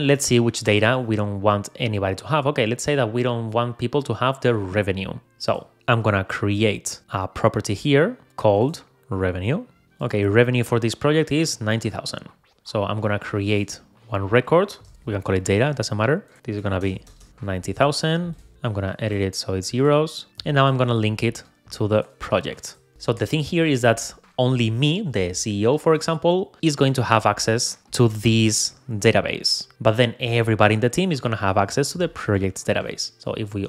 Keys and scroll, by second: 11.5 Escape.